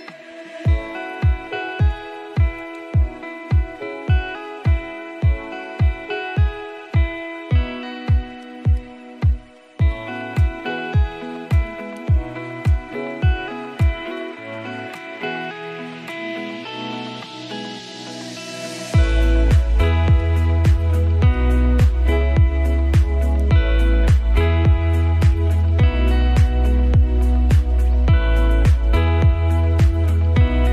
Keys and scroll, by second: 11.5 ctrl+space, 24.3 ctrl+space.